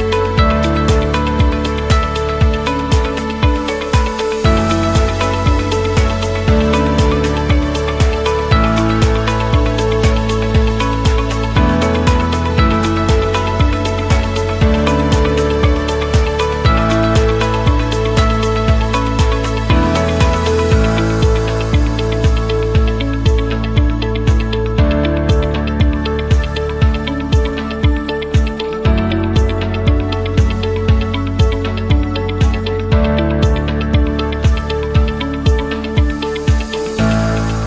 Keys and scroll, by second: 36.9 Escape.